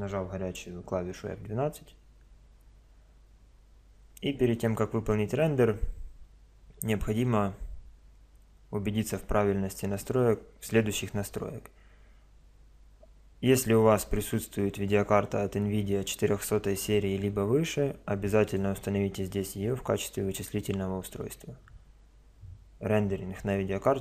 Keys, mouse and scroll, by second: 3.3 F12, 3.3 Escape, 18.4-20.3 drag.